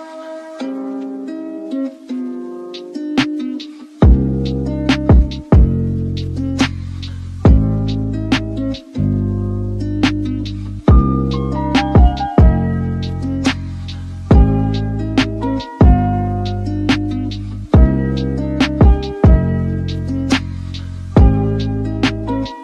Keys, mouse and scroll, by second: 3.1 scroll down 1, 3.2 middle click, 3.9 KP_7, 4.0 scroll up 6, 4.3 x, 5.5 z, 5.9 shift+middle click, 6.3 1, 6.6 z, 7.5-8.8 drag, 8.8 scroll up 3, 9.1 shift+click, 9.7 x, 10.2 scroll down 2, 10.4 middle click, 10.9 shift+scroll down 1, 11.3 alt+click, 12.1 f, 12.5 alt+click, 12.9 f, 13.3 shift+middle click, 13.6 alt+click, 14.1 f, 14.3 middle click, 14.6 scroll down 3, 14.8 KP_1, 15.1 scroll up 2, 15.2 shift+middle click, 16.2 Tab, 16.6-17.6 shift+middle drag, 17.6 scroll down 3, 17.8-18.2 shift+middle drag, 18.2 click, 18.4 Tab, 18.7 e, 19.4 Tab, 19.6-20.3 shift+middle drag, 20.3 shift+a, 21.6 g.